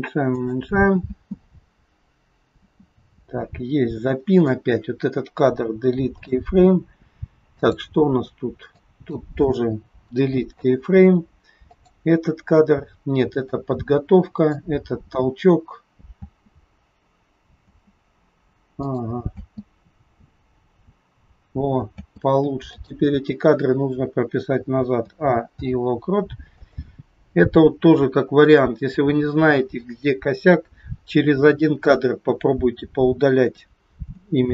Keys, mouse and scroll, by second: 1.0 space, 2.7 space, 3.9 click, 5.4 Delete, 7.5 click, 8.7 click, 9.9 Delete, 11.7 click, 13.4 click, 16.2 space, 17.7 space, 18.9 click, 19.2 space, 22.0 space, 22.8 click, 24.9 a, 25.5 i, 28.4 click, 34.2 a.